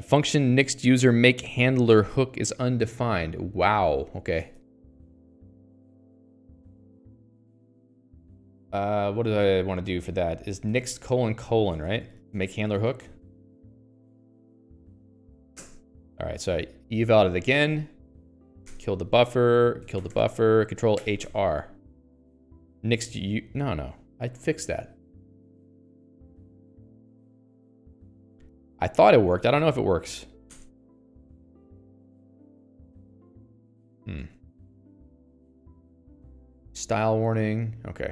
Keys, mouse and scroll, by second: 3.1 ctrl+s, 4.9-6.7 typing, 4.9 click, 9.8-12.4 typing, 12.8 Escape, 13.2 ctrl+s, 13.5 Escape, 13.7-14.8 typing, 14.9 alt+x, 16.1 Return, 17.7 Escape, 24.4 Escape, 25.0 click, 25.1 Escape, 25.5 k, 25.7 k, 26.9 k, 27.5 Escape, 27.7 Escape, 28.0 shift+v, 28.5 j, 29.9 alt+x, 30.9 Return, 31.4 Escape, 32.0 ctrl+s, 32.2 Escape, 32.3 Escape, 33.5 alt+x, 34.6 ctrl+g.